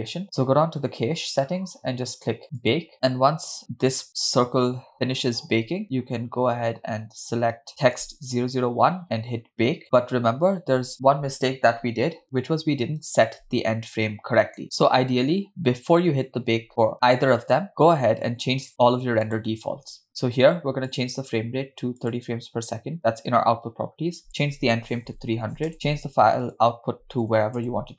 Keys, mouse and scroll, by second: 2.6-7.7 drag, 8.0 click, 9.8-15.2 drag, 19.3 click, 20.1-20.7 scroll up 2, 20.9-22.3 drag, 24.3-25.7 drag, 25.5 0, 26.5-27.9 drag, 27.4 /.